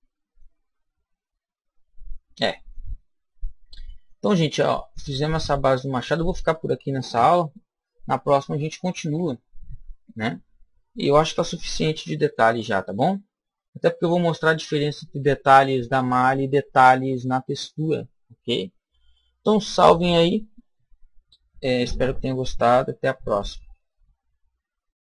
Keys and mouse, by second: 0.6-5.5 middle drag, 12.4-15.9 shift+middle drag.